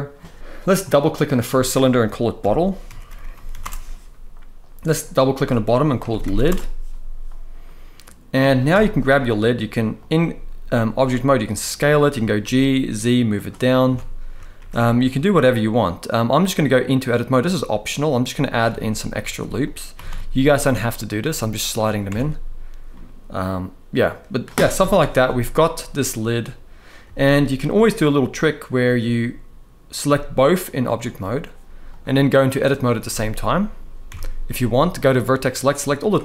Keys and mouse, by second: 0.6 click, 0.7-3.3 drag, 2.9 t, 4.6 click, 5.8 shift+click, 7.3-8.0 middle drag, 8.4 KP_1, 10.7 s, 11.6 click, 11.8 g, 12.1 z, 13.1 click, 13.6 Tab, 14.3 ctrl+r, 18.2 click, 18.5 shift+middle click, 18.9 ctrl+r, 19.6 g, 19.7 g, 21.3 click, 21.9 Tab, 22.6-24.1 middle drag, 24.5 KP_1, 25.1 shift+middle drag, 26.7 z, 30.3 shift+click, 31.6-32.3 drag, 32.8 Tab, 33.8 Tab, 35.2 click.